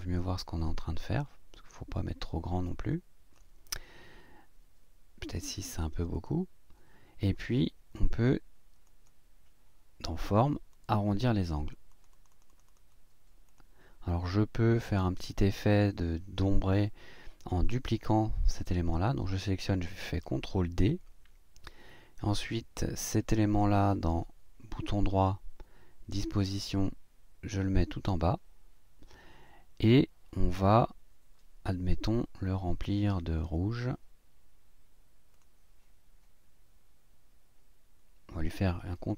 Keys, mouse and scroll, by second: 1.3 scroll up 2, 2.6 click, 5.2 click, 5.6 click, 6.1 click, 8.8 click, 10.7 click, 11.2-12.9 drag, 13.5 click, 14.4-14.8 ctrl+scroll down 2, 17.5 click, 20.2 ctrl+d, 24.0 right click, 28.0 click, 35.3 click, 38.9 click.